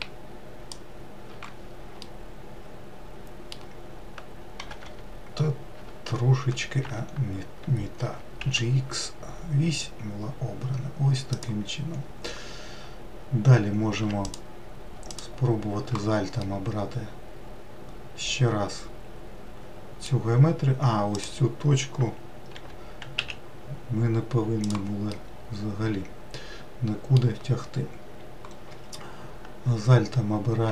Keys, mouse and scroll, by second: 2.4-4.9 middle drag, 4.9 g, 8.3 g, 14.6 click, 15.4 alt+click, 16.7-19.8 middle drag, 21.5 click, 22.8 g, 25.4-28.6 middle drag.